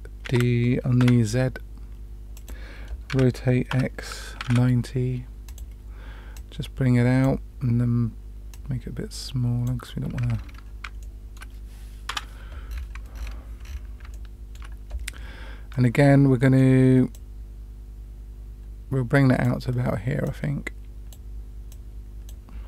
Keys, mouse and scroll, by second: 0.2 shift+d, 3.1 r, 6.3-7.3 drag, 8.5-9.7 drag, 10.3-10.7 scroll up 3, 11.0-11.3 shift+middle drag, 12.0 KP_Decimal, 12.6 scroll up 1, 12.8-13.2 scroll down 4, 13.1 scroll up 1, 13.2-13.7 scroll down 2, 13.7 scroll up 1, 14.1-14.6 shift+middle drag, 15.7 middle click, 17.1-19.4 drag, 20.2-21.1 drag, 21.7 click.